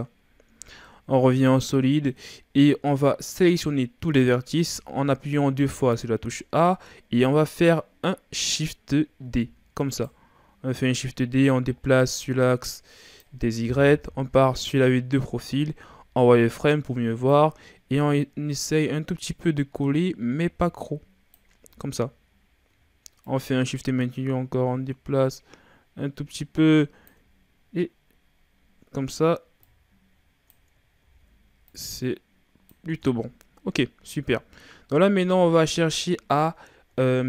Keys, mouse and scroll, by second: 0.3 scroll down 4, 0.6 z, 0.9-2.4 middle drag, 2.4-2.9 scroll up 3, 2.9-4.2 middle drag, 4.2 a, 4.5 a, 6.7-9.3 middle drag, 9.3 shift+d, 11.0-14.0 drag, 14.0 KP_3, 15.1-15.8 scroll up 5, 15.8 z, 17.4-20.4 drag, 21.6 z, 23.3-26.3 shift+drag, 27.9-28.3 scroll down 3, 28.3-29.7 scroll up 5, 29.7-31.0 shift+drag, 31.0 ctrl+z, 31.7-32.9 drag, 32.9 Tab, 33.3-34.0 scroll down 4, 34.0 a, 34.4-34.9 scroll down 1, 34.9-35.3 scroll up 2, 35.3 Tab, 36.8-37.1 scroll down 1, 37.1-37.2 shift+scroll up 4.